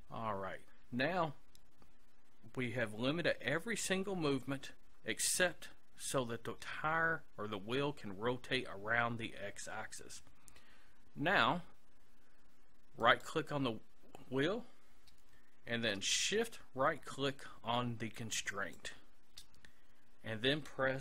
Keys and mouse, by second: 13.1-14.9 right drag, 18.6-20.3 right drag.